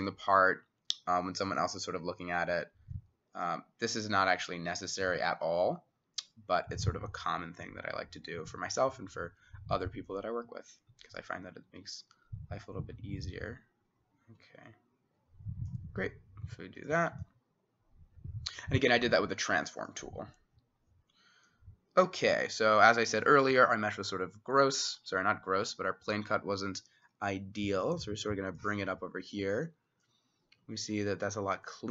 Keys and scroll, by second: 1.6 t.